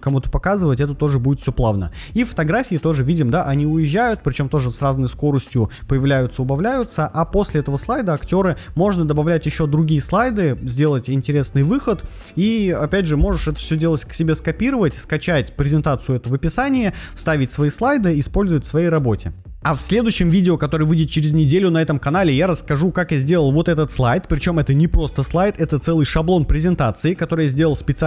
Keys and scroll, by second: 11.4 Right, 12.4 Right, 20.2 Right, 25.8 Right, 26.4 Right.